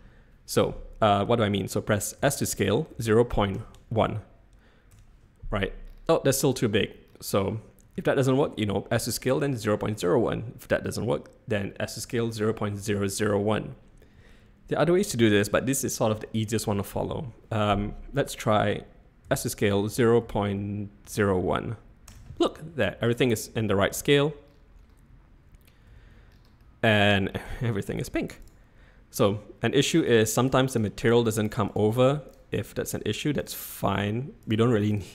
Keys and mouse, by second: 2.2 s, 3.4 click, 7.9 ctrl+z, 19.2 s, 23.0 middle click, 23.3-23.6 middle drag, 23.9 z, 25.9 z, 26.6-27.0 middle drag, 27.7 shift+middle click, 30.0 click, 30.4 click, 30.7 click, 31.3 click, 31.6 click, 32.3 click, 33.4 click.